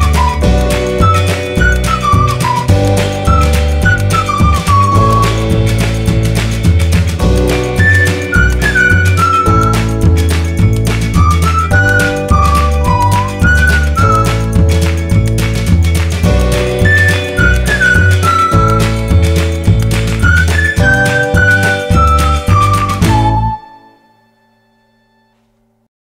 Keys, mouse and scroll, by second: 4.9 click.